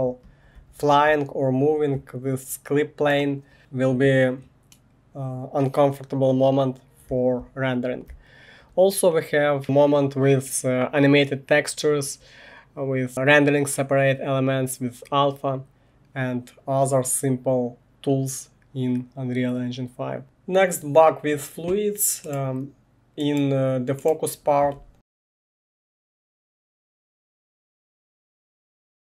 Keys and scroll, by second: 0.0-3.0 typing, 4.7 typing, 7.1 w, 8.3-9.1 typing.